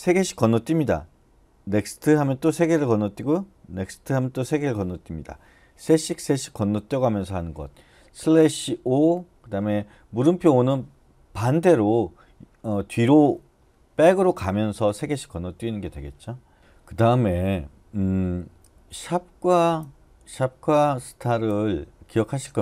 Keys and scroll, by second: 1.7 n.